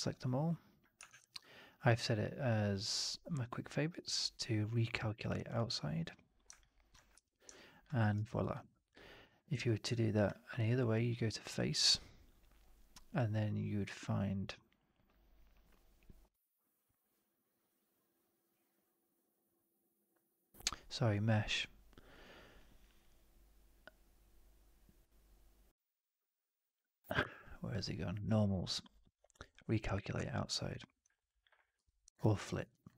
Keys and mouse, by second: 1.0 shift+Tab, 6.6 alt+click, 7.4-7.7 alt+drag, 7.9 middle click, 8.0 right drag, 8.3 click, 12.6-31.0 drag, 31.0 alt+right click, 31.2 alt+click, 31.8 4, 32.1 alt+drag, 32.4 middle drag, 32.6 right drag, 32.8 drag.